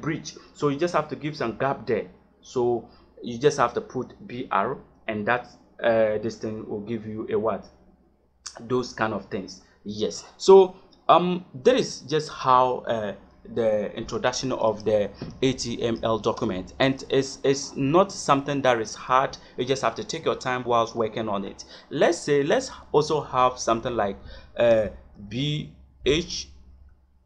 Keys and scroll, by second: 23.6 Return, 24.6 shift+,, 25.9 h.